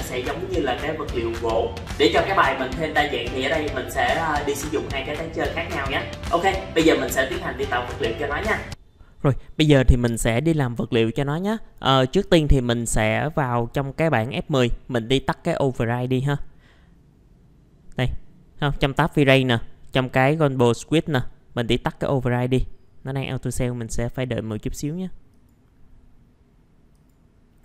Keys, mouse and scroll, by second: 8.7 ctrl+r, 13.3 click.